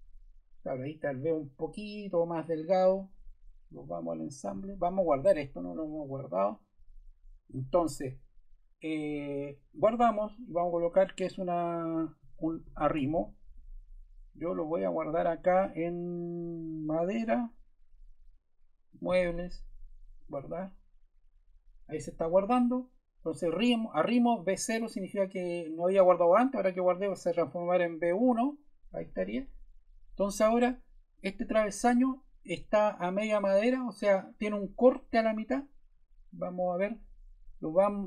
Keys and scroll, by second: 11.9-13.6 typing.